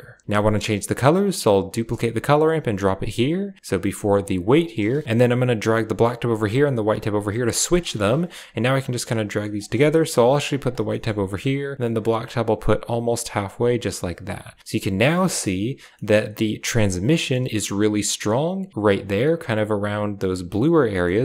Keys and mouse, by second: 0.9 right click, 1.6 shift+d, 2.8 click, 4.1 click, 5.4-5.9 drag, 6.4-6.9 drag, 7.7-8.4 drag, 8.7 click, 10.3 click, 10.8 middle click, 12.0-13.5 drag, 14.6 click, 15.3 shift+middle click, 15.9 middle click, 17.2 shift+middle click, 21.0 shift+middle drag.